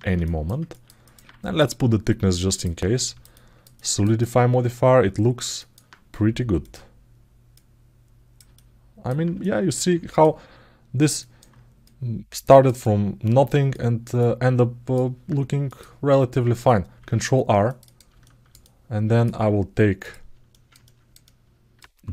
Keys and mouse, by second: 0.0 alt+shift+middle click, 0.5 ctrl+alt+middle click, 0.8 alt+middle click, 1.3-2.4 drag, 2.7 alt+shift+middle click, 3.1 alt+middle click, 3.9-5.2 alt+middle drag, 5.3 alt+shift+middle click, 6.4 click, 7.3 click, 8.3 alt+middle click, 9.2 alt+middle click, 9.9 click, 10.9 alt+middle click, 11.7 click, 12.6 alt+middle click, 13.5 alt+shift+middle click, 14.0 alt+middle click, 15.5 click, 16.7 ctrl+r, 18.0-19.0 alt+shift+middle drag, 19.8 click, 21.1 alt+middle click.